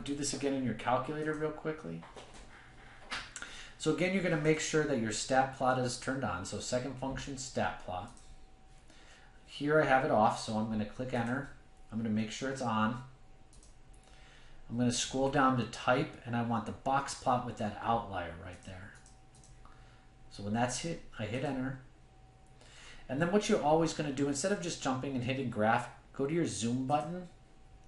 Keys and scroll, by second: 7.9-8.7 typing.